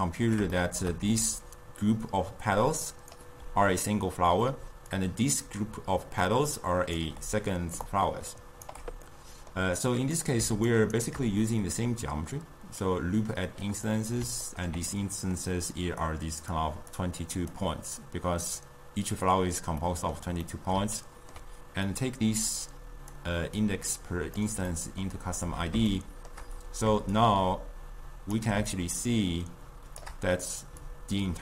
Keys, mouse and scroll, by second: 1.3 d, 1.5-3.2 drag, 3.2 d, 3.4 d, 4.2 d, 4.6 d, 5.0-7.1 drag, 7.1 d, 7.2 d, 7.9 d, 8.0 right click, 8.8 d, 9.2-10.8 middle drag, 10.8 shift+right click, 11.7-14.2 drag, 14.2-16.1 middle drag, 16.1 click, 17.1 click, 19.9-22.0 middle drag, 22.0 drag, 23.7-24.8 drag, 24.8-27.2 middle drag, 27.2-30.8 shift+drag, 30.8 d, 30.9 click.